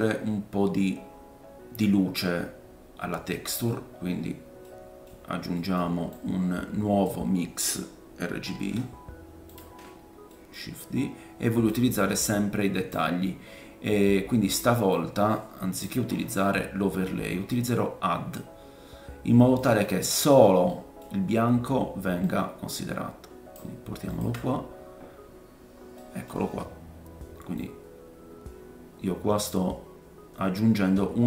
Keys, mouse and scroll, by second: 0.0 scroll down 2, 3.5 middle click, 3.9-4.6 scroll down 2, 4.6 middle click, 5.5 middle click, 6.1 click, 8.5 shift+d, 9.2-16.8 drag, 16.1-16.8 scroll up 4, 16.8 scroll down 2, 16.9-17.5 scroll up 1, 17.5 click, 20.0-20.5 scroll down 2, 20.9-22.4 middle drag, 22.4-31.2 drag, 26.0 middle click, 26.3-27.2 scroll up 4, 27.5-31.2 middle drag, 27.5-31.2 right drag.